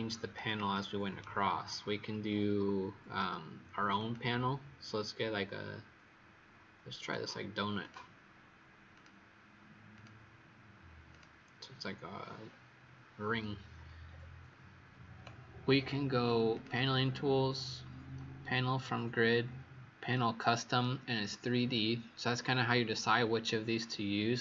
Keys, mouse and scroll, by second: 0.3 right click, 3.9 click, 12.2-14.0 scroll up 4, 14.0-14.4 scroll down 1, 16.4 click.